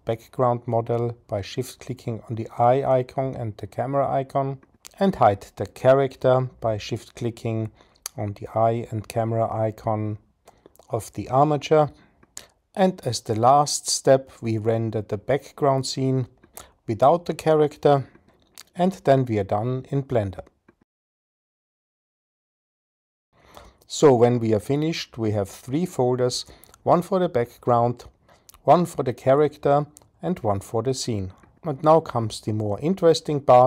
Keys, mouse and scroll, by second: 2.3 shift+click, 2.5-6.0 shift+middle drag, 6.0-7.4 drag, 7.4-8.6 middle drag, 8.6-9.8 drag, 9.8-12.5 middle drag, 13.9 click.